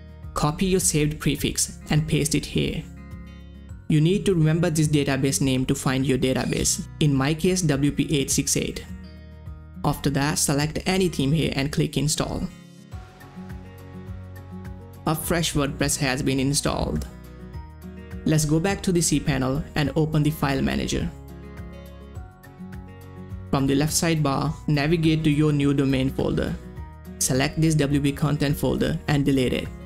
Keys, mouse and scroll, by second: 1.8 ctrl+c, 2.3 click, 2.8 ctrl+v, 3.2 click, 5.5 click, 8.6 click, 8.6 click, 9.0 scroll down 1, 10.0 click, 11.3 click, 11.3 click, 12.2 scroll down 1, 12.7 click, 12.9 scroll up 1, 15.6 click, 21.0 click, 21.0 scroll down 1, 22.7 click, 24.4 click, 24.4 click.